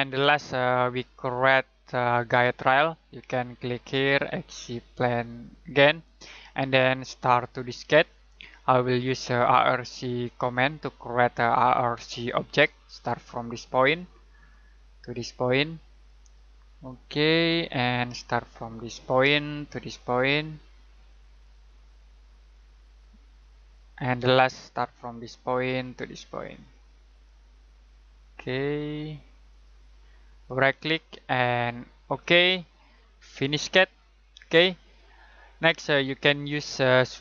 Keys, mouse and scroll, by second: 5.6 click, 10.1 scroll down 1, 10.4-11.0 scroll up 1, 11.4 middle click, 14.3 click, 22.4 click, 29.5 click, 30.4 right click, 32.0 click, 34.6 scroll down 1, 34.8-35.6 scroll up 1, 35.6 middle click, 36.4-36.9 scroll up 1.